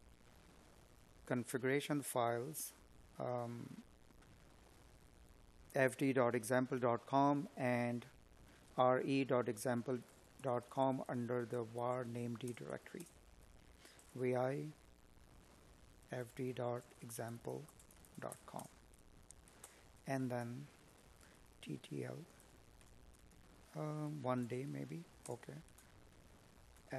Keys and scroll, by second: 7.2 space, 10.9 space, 20.0 space, 23.9 space.